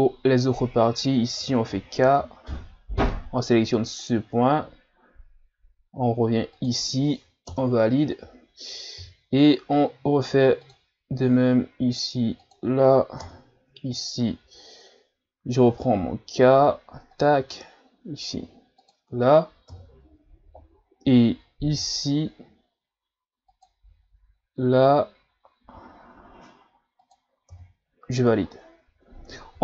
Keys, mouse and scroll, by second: 15.9 k.